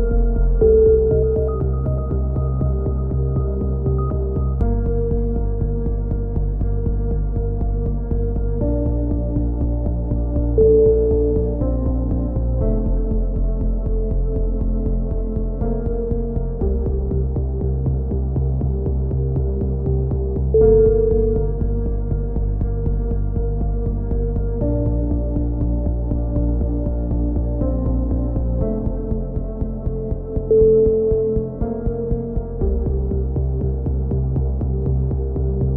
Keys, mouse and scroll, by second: 0.5 Tab, 3.5-4.5 middle drag, 4.5 a, 4.7 middle click, 5.0 Tab, 5.5 click, 11.0 ctrl+KP_7, 11.5 z, 12.2 middle click, 13.1 z, 13.4 z, 14.4 click, 15.1-18.6 middle drag, 18.6 click, 19.0 middle click, 19.1 click, 19.5 middle click, 20.0 z, 20.5 Tab, 20.9 z, 21.4 right click, 21.6 z, 22.4-23.4 middle drag, 23.4 z, 25.9 click, 26.3 z, 27.0 s, 27.9 click, 28.0 z, 29.1 middle click, 29.4 click, 35.1 z.